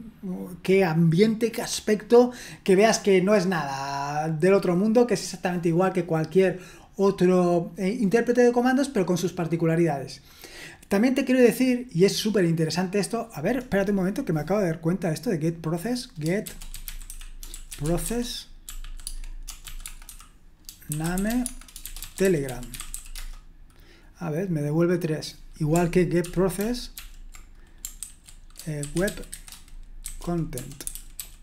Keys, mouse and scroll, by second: 16.5-23.4 typing, 27.0 ctrl+p, 28.0 ctrl+w, 28.5-31.4 typing.